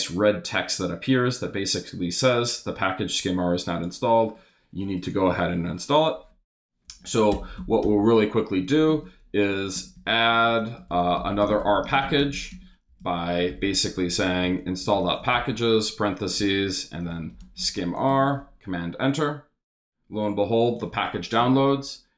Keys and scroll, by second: 6.9 Up, 7.3 Return, 7.5 Up, 7.8 Return, 8.6 shift+Return, 8.7-18.0 typing, 18.1 super+Return, 21.4 Return.